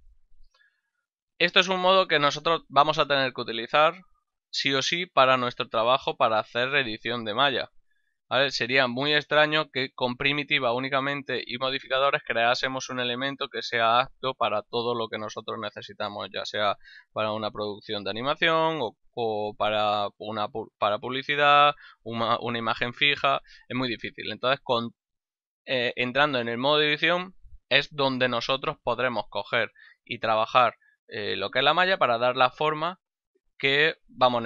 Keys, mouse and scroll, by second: 25.4 middle click, 30.5 middle click, 33.6 ctrl+middle click.